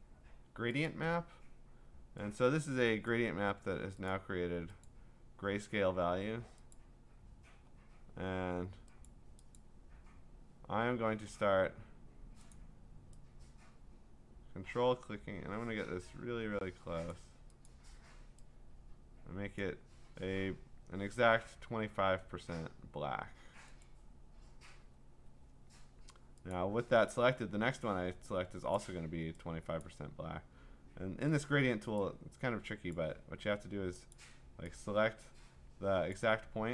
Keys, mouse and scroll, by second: 0.9 click, 3.1 click, 4.1 click, 4.9 click, 6.8 click, 9.1 click, 9.6 click, 12.5 click, 17.1 click, 17.7 click, 19.6 click, 23.8 click, 26.5 click, 28.8 click, 29.8 click, 31.4 click, 32.9 click, 34.1 click, 36.1 click.